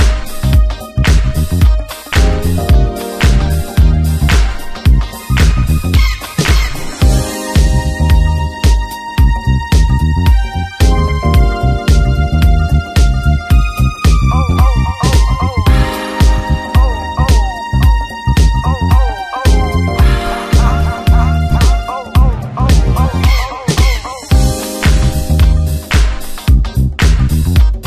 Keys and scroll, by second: 0.0 ctrl+KP_Subtract, 1.3 w, 3.1 Return, 3.8 ctrl+n, 5.4 ctrl+m, 6.6 Return, 7.2 space, 9.5 space, 12.5 w, 12.8 Return, 13.9 alt+space, 14.2 c, 15.3 space, 15.4 Return, 16.1 ctrl+KP_Add, 16.8 alt+i, 17.3 ctrl+space, 17.8 shift+F2, 18.1 ctrl+space, 18.6 w, 21.1 ctrl+alt+d, 21.4 2, 21.8 Return, 22.2 shift+F2, 23.0 shift+F2, 23.4 ctrl+d, 23.6 space.